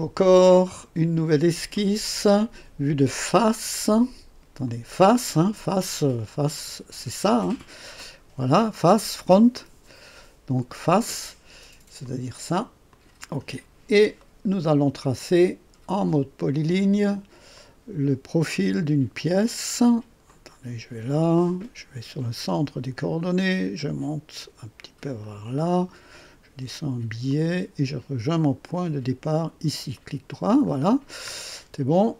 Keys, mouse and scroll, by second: 0.1 click, 1.7 click, 3.6 click, 4.6 click, 9.5 click, 10.5 click, 12.0 click, 12.8 click, 14.1-15.1 right drag, 17.5 click, 20.2 click, 22.4 click, 25.1 click, 27.2 click, 29.3 click, 29.9 right click, 30.6 scroll up 1, 30.9-31.3 scroll down 1, 31.4 right click.